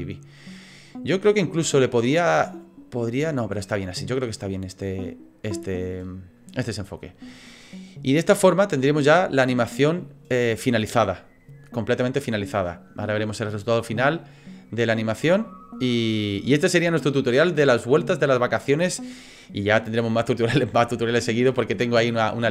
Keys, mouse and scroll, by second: 8.1 click.